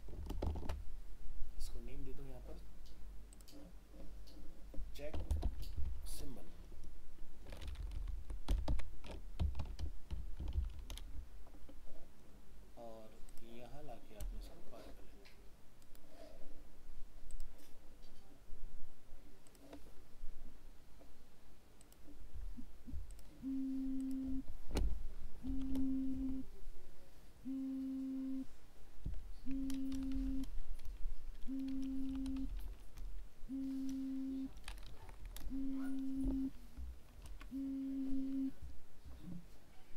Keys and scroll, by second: 0.6 ctrl+alt+shift+s, 37.2 ctrl+s.